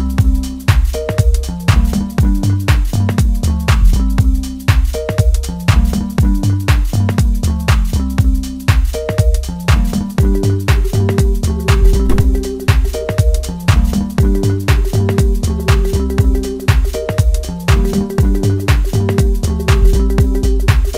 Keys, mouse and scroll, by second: 1.1-1.7 drag, 1.7-2.0 scroll up 4, 3.2 click, 3.7-4.3 scroll down 9, 6.8-7.2 scroll down 3, 7.8-8.2 drag, 9.1-12.1 drag, 12.4 click, 12.9 scroll up 2, 14.8-16.9 middle drag, 16.9 KP_1, 17.7 scroll up 1, 19.3-20.8 drag.